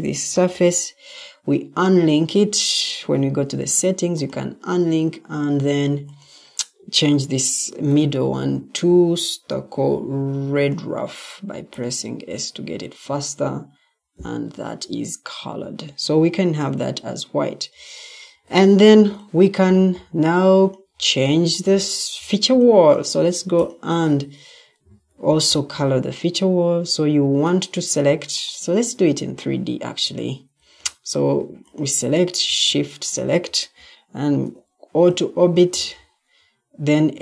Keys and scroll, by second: 0.1 ctrl+t, 14.5 Escape, 14.5 typing, 18.8 Escape, 24.7 Escape, 30.7 Escape.